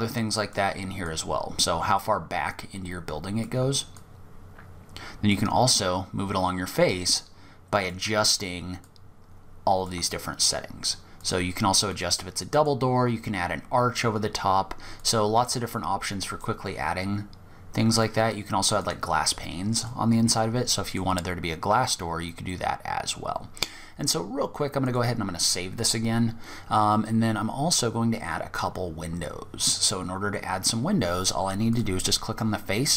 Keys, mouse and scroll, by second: 0.2 click, 3.1 click, 5.4 click, 8.0 click, 10.4 click, 11.1 click, 11.7 click, 13.3-14.1 scroll down 3, 14.1 click, 17.1 click, 19.1 middle click, 20.5-21.0 scroll up 1, 21.0-22.0 scroll down 5, 22.0 scroll down 3, 22.3-23.6 scroll down 1, 23.6-24.0 scroll down 1, 24.0 click, 29.3-30.7 scroll up 1, 30.7 scroll up 1, 30.9 click.